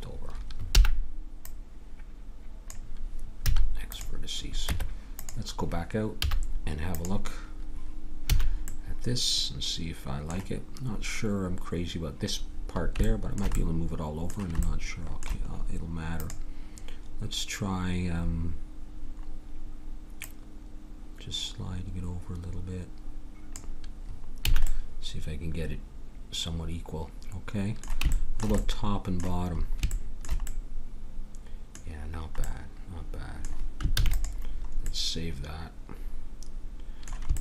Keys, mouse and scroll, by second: 0.7 b, 3.4 x, 4.6 Tab, 6.2 z, 8.3 a, 16.2-18.0 drag, 20.2-22.1 drag, 24.5 a, 33.9 ctrl+s.